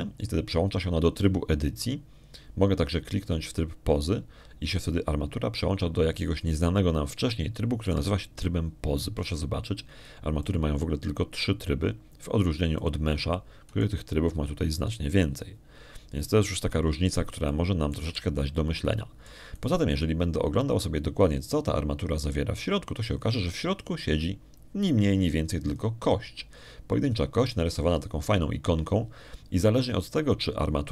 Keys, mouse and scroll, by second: 1.4 click, 5.8 click, 12.3 click, 14.6 click, 15.6 right click, 16.6 click, 19.4 middle click, 19.9 z, 20.2-21.3 middle drag, 21.4 right click, 24.7 click, 27.6 click.